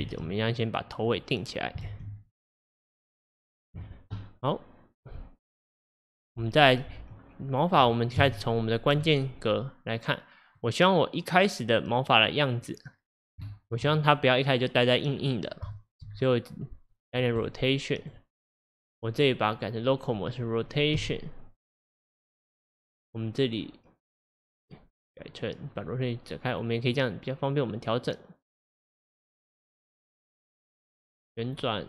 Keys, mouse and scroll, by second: 0.1 shift+d, 2.0 shift+d, 6.3 scroll down 1, 7.6 middle click, 8.2 KP_1, 10.6 click, 13.0-13.5 scroll down 4, 13.5-15.2 shift+middle drag, 15.2-15.8 scroll up 4, 15.8-16.2 shift+middle drag, 16.0 click, 16.2-17.0 scroll up 3, 17.0 middle click, 17.4 click, 18.1 click, 21.1 r, 24.5-27.1 drag.